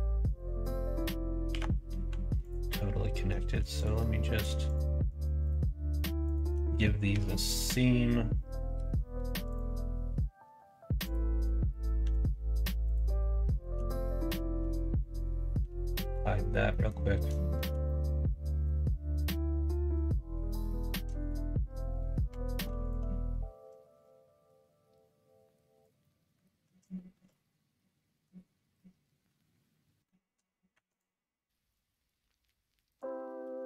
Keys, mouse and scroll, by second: 1.4 2, 2.3 alt+click, 6.2 shift+click, 7.0 ctrl+e, 11.0 click, 11.9 l, 12.8 click, 13.7 3, 14.5 l, 15.5 h, 15.9 middle click, 16.7 middle click, 17.3 shift+middle click, 17.8 middle click, 19.1-20.5 middle drag, 21.1 click, 22.2 2, 22.8 alt+click, 24.0-25.8 drag, 26.0 middle click, 26.9 shift+middle click, 27.7 middle click, 28.8-30.1 middle drag, 30.7 1, 31.7-33.0 drag, 33.4 g.